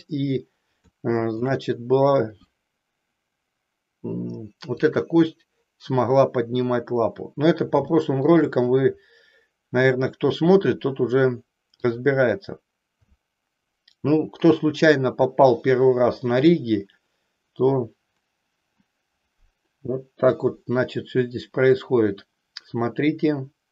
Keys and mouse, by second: 1.0 shift+middle click, 4.8 click, 7.9 shift+middle click, 11.7 click.